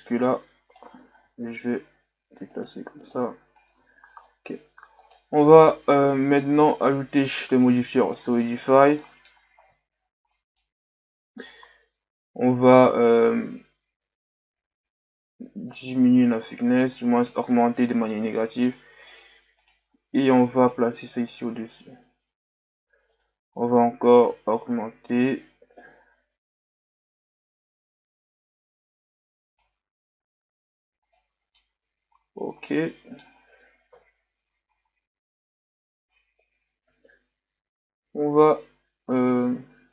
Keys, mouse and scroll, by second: 1.3 s, 3.1-3.8 drag, 3.8 Tab, 4.2-4.6 scroll down 1, 5.0 right click, 7.7-9.0 drag, 9.0-9.6 middle drag, 9.6-10.3 scroll up 7, 10.3-10.9 middle drag, 10.9-12.6 scroll up 1, 12.6-13.3 scroll up 1, 13.3-16.2 shift+drag, 16.2 a, 16.6-16.9 scroll down 3, 16.9-17.5 middle drag, 17.5-18.1 scroll up 1, 18.1-19.6 middle drag, 19.6-21.3 drag, 23.1-27.3 drag, 29.9 a, 30.5-31.1 scroll down 1, 31.1-32.1 middle drag, 32.1-32.7 scroll down 2, 32.7-33.9 middle drag, 33.9 KP_1.